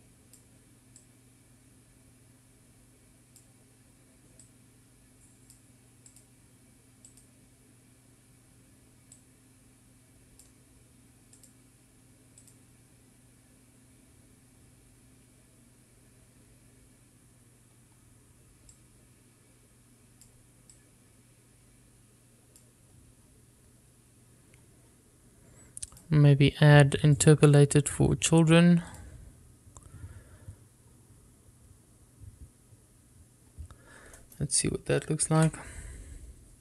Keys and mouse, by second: 2.2-4.6 drag, 5.7-6.8 drag, 7.4-8.4 drag, 10.3-11.6 drag, 12.6-13.7 drag, 20.1-21.5 drag, 21.9-23.9 drag, 27.1 click, 28.4 click.